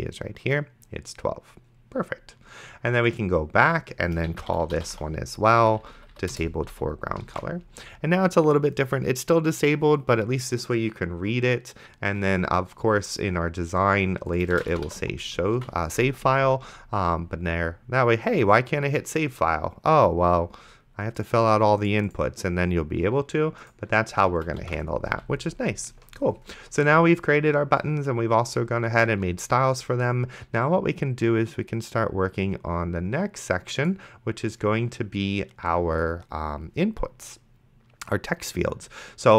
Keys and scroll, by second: 4.3-5.4 typing, 5.6 Down, 6.3 Return, 6.7 ,, 7.6 ctrl+s, 14.5-15.5 typing, 15.8 ctrl+s, 24.6 ctrl+x, 24.9 s.